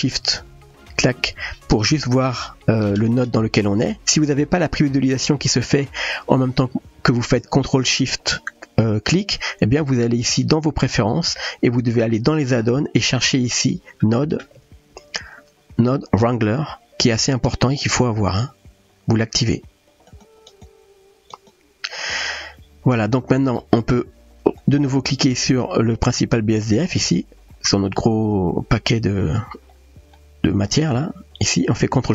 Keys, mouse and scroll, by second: 0.9 ctrl+shift+click, 6.3-11.0 drag, 12.2 click, 13.2-20.2 drag, 20.6-21.5 drag, 23.1-23.6 middle drag, 24.6-25.5 drag, 30.9 click.